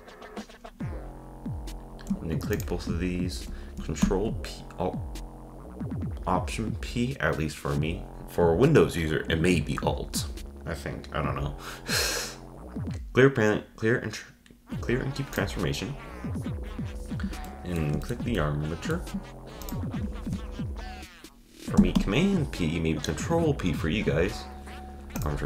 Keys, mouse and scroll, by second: 2.5 shift+click, 4.0 alt+p, 16.8-17.5 scroll down 5, 17.5-19.6 shift+middle drag, 19.6 shift+drag, 22.0 p.